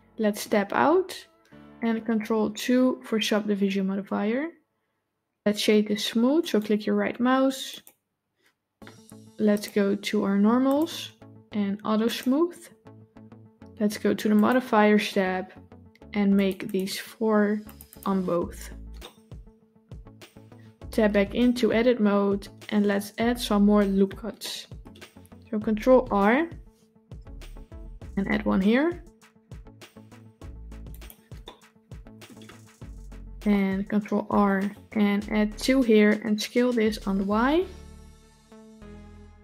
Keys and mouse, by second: 0.7 Tab, 2.1 ctrl+2, 6.3-7.7 right drag, 9.4 click, 10.6 click, 12.0 click, 14.3 click, 16.5 click, 17.5 click, 17.7 click, 18.9-20.8 middle drag, 21.3 Tab, 24.3 middle click, 25.6 ctrl+r, 31.3 middle click, 33.1 ctrl+r, 37.3 s.